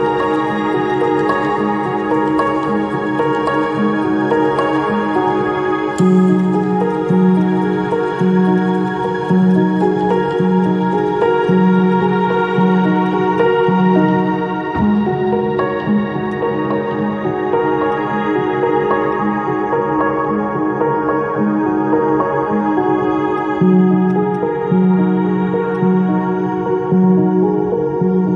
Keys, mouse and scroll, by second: 0.3 ctrl+click, 0.9 ctrl+click, 2.1 ctrl+i, 6.3 ctrl+click, 6.9 ctrl+click, 16.3 ctrl+click, 20.9 ctrl+i.